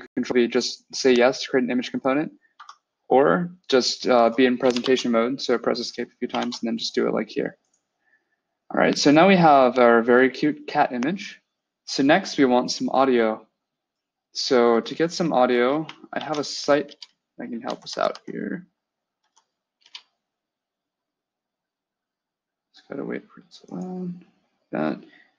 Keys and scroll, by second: 2.4 Escape, 4.5 BackSpace, 4.7 Escape, 6.2 ctrl+v, 16.0 ctrl+F3, 16.7 Return, 17.5 Down, 17.7 Down, 17.9 Down, 19.0 Up, 19.7 Return.